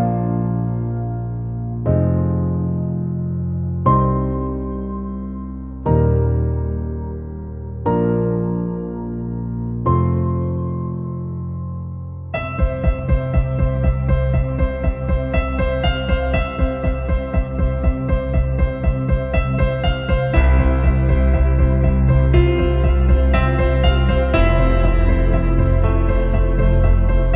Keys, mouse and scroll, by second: 0.6 g, 1.9 click, 2.2-2.9 middle drag, 3.4 click, 4.1 click, 4.3 middle drag, 4.5 scroll down 3, 4.7 middle click, 5.5 shift+a, 6.7 middle click, 7.3 g, 8.3 x, 8.8 g, 9.4 middle click, 10.1 click, 10.2 drag, 10.3 click, 10.8 click, 11.2 click, 11.4 click, 11.8 n, 12.1 click, 12.3 n, 12.5 scroll down 2, 12.7-13.5 middle drag, 13.8-15.6 shift+middle drag, 16.0 scroll up 1, 16.3-17.7 ctrl+middle drag, 18.1-19.8 middle drag, 20.3 n, 20.6 click, 20.7 n, 21.3 click, 22.0 shift+d, 23.1 g, 24.1 click, 24.3 scroll down 1, 24.4-24.9 middle drag, 24.9 scroll down 2, 25.0-25.8 middle drag, 25.8 click, 26.4 click, 26.7 click, 26.9 click.